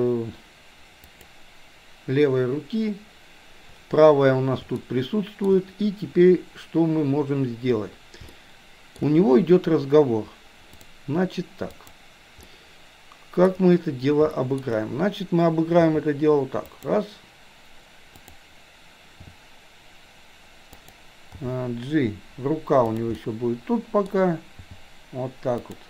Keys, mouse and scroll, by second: 4.7-5.5 shift+middle drag, 8.4-9.0 shift+middle drag, 10.9 click, 11.9 click, 12.5-13.6 middle drag, 14.4 shift+middle drag, 15.9 r, 18.2 click, 19.2 r, 21.4 g, 23.1-24.1 middle drag, 24.7 g.